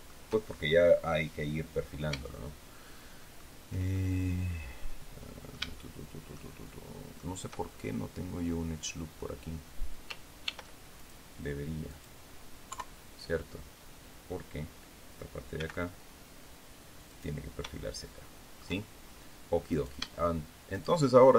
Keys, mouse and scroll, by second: 0.8-1.2 scroll up 2, 2.2-3.4 shift+middle drag, 3.8 shift+middle click, 3.9 shift+scroll up 2, 5.7 shift+middle click, 6.5 shift+middle click, 7.6 shift+scroll down 2, 10.3 ctrl+r, 10.9 ctrl+click, 11.8 click, 12.6 KP_3, 15.5 g, 17.0 click, 17.6-18.7 shift+middle drag, 19.6 shift+right click, 20.6 shift+right click.